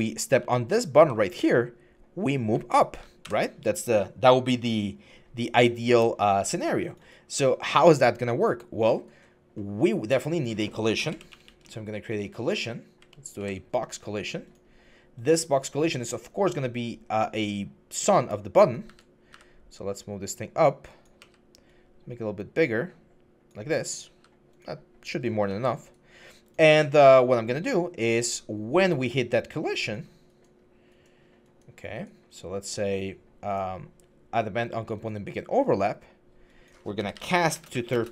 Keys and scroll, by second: 0.0-0.7 typing, 1.8-2.5 typing, 3.0 Escape, 10.8-11.4 typing, 12.3 Down, 12.8 Down, 13.2 Down, 18.6-19.1 typing, 20.7-21.5 typing, 23.9 w, 25.3 s, 36.8-38.1 typing.